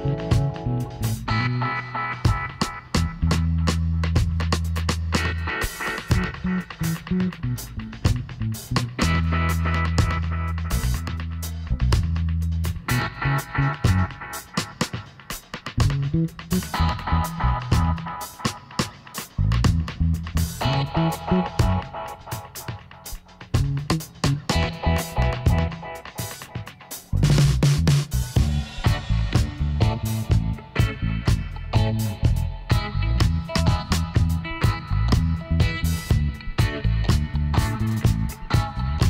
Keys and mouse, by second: 1.5-2.6 drag, 2.6 middle click, 3.3-7.7 drag, 8.6-11.2 middle drag, 10.9 e, 11.3 middle click, 12.5 middle click, 13.0 click, 13.5 r, 15.2 g, 16.8 r, 19.2-23.3 drag, 21.5 ctrl+r, 23.4-25.2 drag, 24.2 g, 26.3 s, 28.7-30.1 middle drag, 29.6 ctrl+r, 31.1 g, 33.3 s, 35.1-36.8 drag, 36.0 ctrl+r, 38.3 s.